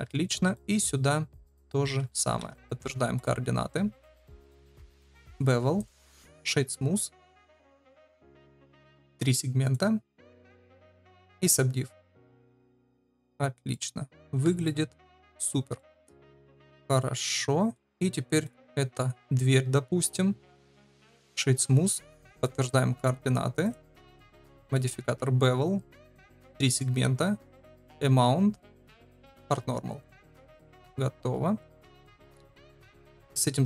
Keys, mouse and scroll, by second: 0.5-2.1 drag, 2.2 ctrl+a, 5.7-6.4 right drag, 8.2 ctrl+v, 8.9 click, 9.6 click, 11.3-12.9 drag, 13.1 click, 13.7-14.1 middle drag, 14.3 ctrl+s, 14.6-15.5 middle drag, 15.7 shift+drag, 16.7-17.7 middle drag, 20.8 click, 21.8 ctrl+a, 26.1 click, 27.8 ctrl+v, 28.7 click, 29.3 click, 30.0-30.3 shift+middle drag, 30.4-30.9 middle drag, 31.5 middle click, 32.9 click.